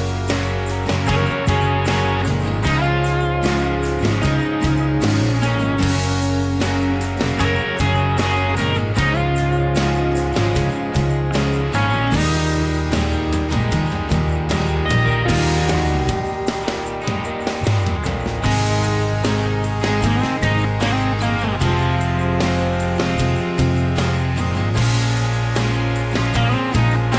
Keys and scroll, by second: 1.7 Escape.